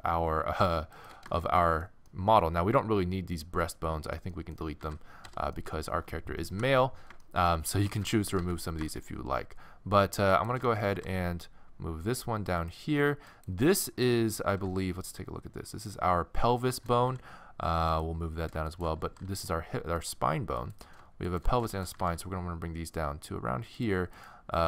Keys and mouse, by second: 2.5-4.1 middle drag, 4.8 x, 5.7 middle click, 6.5 KP_1, 7.7 a, 7.9 a, 8.4 a, 10.3 click, 10.9-12.1 right drag, 10.9 g, 13.3 click, 14.4 click, 14.5 right click, 14.5 n, 17.1 g, 18.7-23.8 right drag, 19.0 g, 21.9 g, 24.2-24.6 right drag.